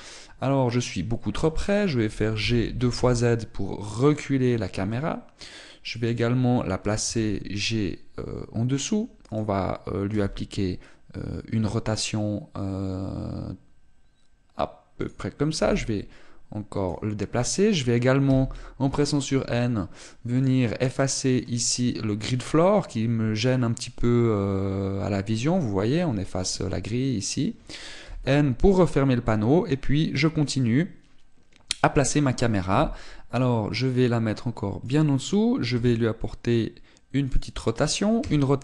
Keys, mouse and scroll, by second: 2.7 click, 3.0 g, 6.7 click, 7.7 g, 10.0 click, 10.7 r, 15.7 click, 16.2 g, 17.5 click, 18.9 n, 19.6-20.7 scroll up 8, 20.7 scroll up 1, 21.0 click, 22.8 click, 26.1 click, 27.9 click, 28.7 n, 29.3-29.7 scroll up 2, 29.7-31.1 scroll down 1, 33.4 g, 35.6 click, 36.4 r, 37.9 click.